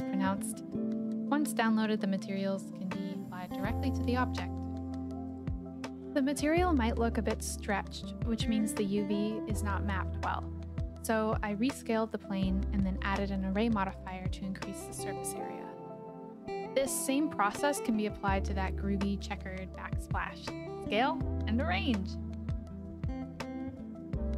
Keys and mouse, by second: 2.0 middle click, 5.2 middle click, 6.1 shift+middle click, 6.3 shift+middle click, 8.1 middle click, 8.9 shift+middle click, 9.0 KP_7, 9.9 s, 10.3 x, 12.6 click, 15.0-16.3 drag, 17.9 click, 18.6 g, 18.8 x, 19.5 click, 21.7 click, 21.7 middle click, 22.5 shift+click, 23.3 middle click, 23.9 shift+click.